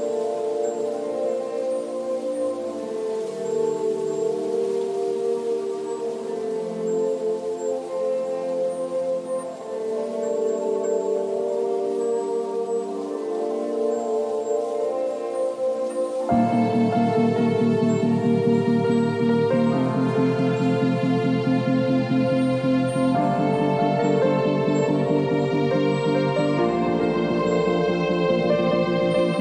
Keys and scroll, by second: 14.6 v, 29.1 ctrl+t.